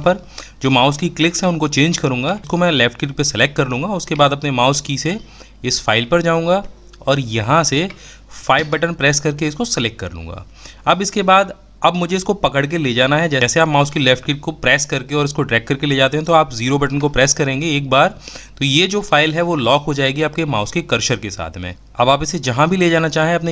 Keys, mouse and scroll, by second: 16.3 KP_0.